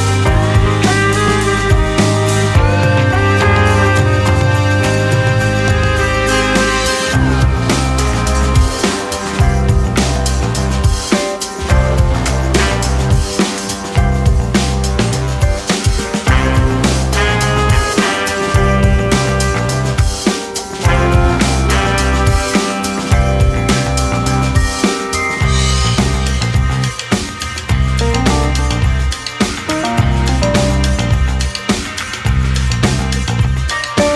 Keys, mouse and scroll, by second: 4.7 click, 5.3 shift+click, 5.8 s, 11.0 shift+click, 11.7 shift+click, 12.9 g, 17.4-18.7 middle drag, 18.7-20.8 scroll up 1, 21.3 ctrl+r, 28.5 2, 28.7 click, 29.8 alt+click, 31.8 g.